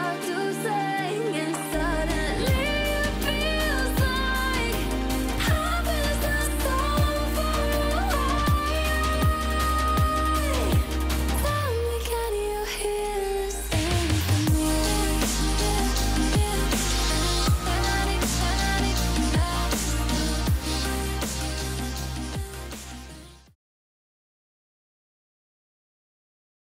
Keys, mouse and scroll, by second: 2.3 3, 3.3 click, 6.9 click, 9.1 click, 10.4 click, 13.3 click, 15.0-15.7 typing, 16.0 click, 18.7 F7.